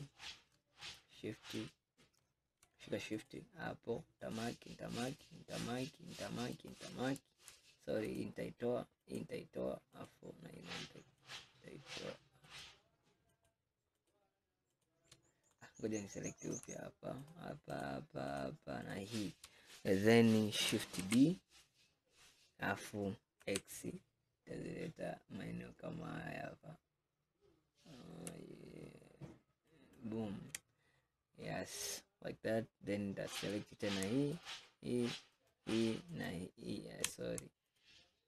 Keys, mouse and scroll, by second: 0.9 click, 3.2 shift+click, 4.3 shift+click, 5.1 shift+click, 5.9 shift+click, 6.6 shift+click, 8.1 shift+click, 9.1 shift+click, 10.0 shift+click, 11.3 shift+click, 12.5 shift+click, 13.4 shift+click, 14.0 shift+click, 14.8 shift+click, 15.5 click, 16.5 click, 17.3 shift+click, 17.7 shift+click, 18.3 shift+click, 18.9 shift+click, 21.1 shift+d, 33.5 click, 34.4 shift+click, 35.4 shift+click, 36.2 shift+click, 37.7 shift+click.